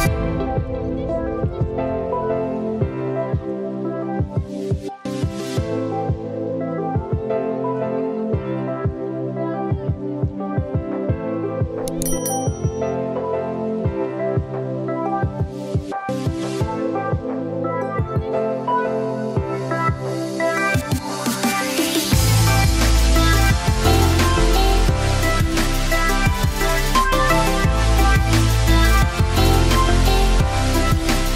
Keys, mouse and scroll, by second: 0.2 ctrl+z, 1.0 ctrl+z, 2.0 ctrl+b, 4.2-8.8 drag, 9.8-12.4 drag, 12.7 Tab, 13.6 click, 14.7 shift+a, 17.7 g, 21.3 click, 23.9 Tab, 28.1 click, 28.5 click, 28.7 click, 29.5 click, 30.3 click.